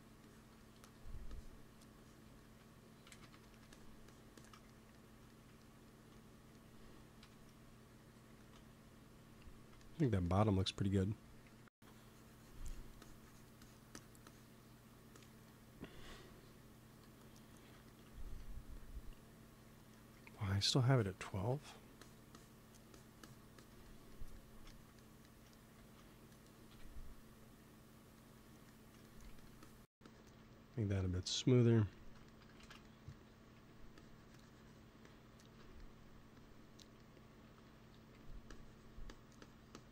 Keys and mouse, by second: 0.9 f, 3.0 shift+c, 3.2 f, 4.7 click, 5.0 click, 7.1 KP_1, 8.2 ctrl+s, 9.7 middle click, 11.4 f, 11.8-16.9 drag, 17.1-25.4 drag, 20.4 f, 25.7 ctrl+s, 26.6 KP_1, 29.2 f, 29.5-31.6 drag, 32.5 shift+c, 33.4 f, 33.8-38.1 drag, 37.3 p, 37.9 f, 38.4-39.6 drag.